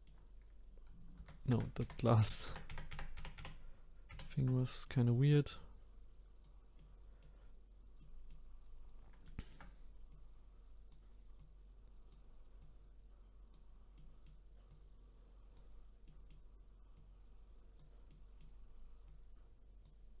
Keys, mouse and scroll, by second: 0.5-1.2 scroll up 1, 1.2 ctrl+z, 1.5-2.9 ctrl+z, 4.6 middle click, 5.3-6.8 drag, 6.8 middle click, 7.7 scroll up 1, 8.0 middle click, 8.7-9.2 scroll up 1, 9.2 shift+middle click, 10.1-13.9 drag, 13.9 middle click, 14.7-16.0 drag, 16.0 middle click, 16.9-18.1 drag, 18.1 middle click, 19.1-20.2 drag.